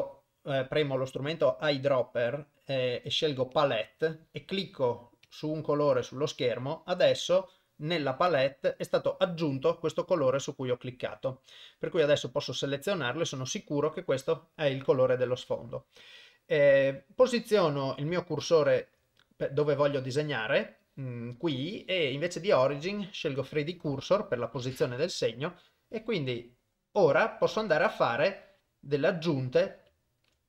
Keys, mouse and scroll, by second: 3.6 click, 5.3 click, 7.3 click, 8.3 click, 18.4 shift+right click, 22.3-23.8 drag, 25.6 click, 28.4 click, 30.2 shift+right click.